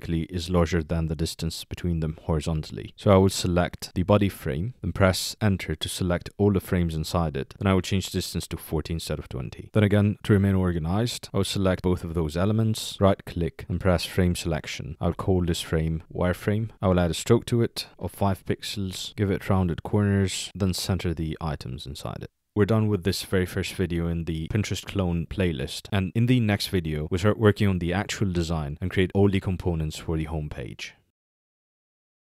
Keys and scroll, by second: 5.4 Return.